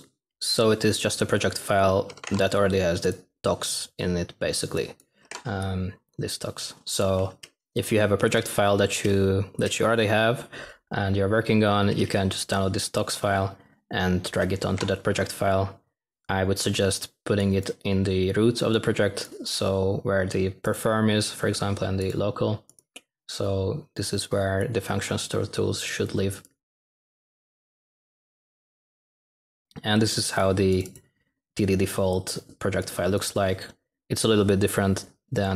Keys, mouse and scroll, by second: 5.2 click.